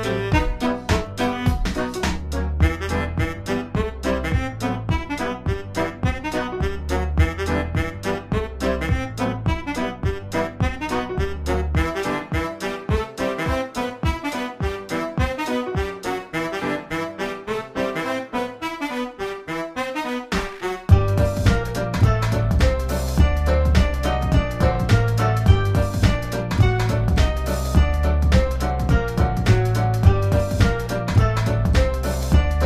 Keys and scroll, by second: 0.2 space, 0.6 space, 2.4 space, 2.9 space, 3.5 space, 4.0 space, 5.1 space, 5.5 space, 6.5 space, 6.9 space, 7.6 space, 8.2 space, 14.6 space, 15.8 space, 16.2 space, 17.5 space, 18.3 space, 23.0 space, 27.0 space, 27.7 space, 29.4 space, 31.0 space.